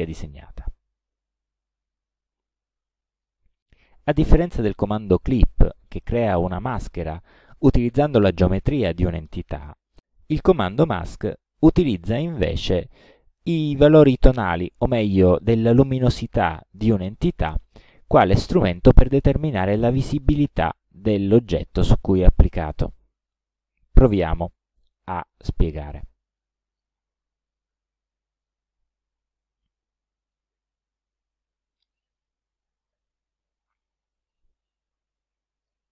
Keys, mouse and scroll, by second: 1.0 Delete, 3.2 click, 22.8 click, 24.5-27.0 drag, 28.4 click, 29.7 click, 30.9 ctrl+scroll up 2, 32.9 click, 34.3-35.9 ctrl+drag.